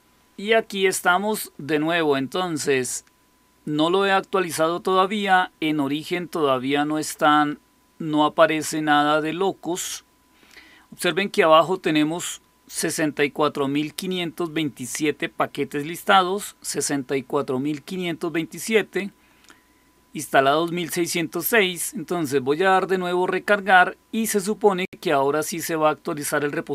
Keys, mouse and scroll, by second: 6.2-10.9 drag.